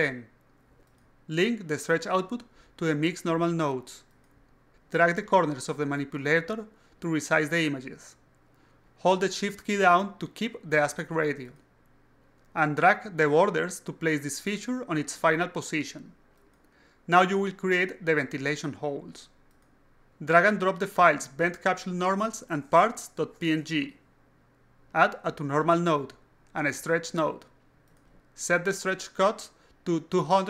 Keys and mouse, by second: 1.8 click, 2.5 alt+click, 3.4 click, 4.3 alt+click, 6.8-11.9 shift+drag, 12.2-12.6 alt+drag, 13.3-14.5 drag, 15.1-15.9 drag, 16.3-17.1 drag, 17.6 alt+click, 18.2-18.9 alt+drag, 19.3 click, 19.8 click, 20.5-20.9 drag, 22.4-23.8 drag, 24.3 click, 24.8 click, 25.3 click, 25.9 click, 26.5 click, 27.2 click, 28.4 shift+click, 30.2-30.4 shift+drag.